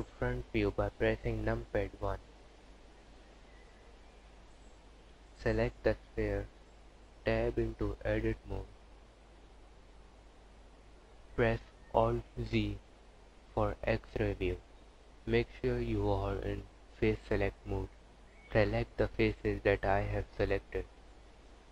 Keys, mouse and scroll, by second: 0.7 z, 4.7 scroll down 1, 6.7 Tab, 11.9 alt+z, 12.7 click, 13.9 click, 20.0 click.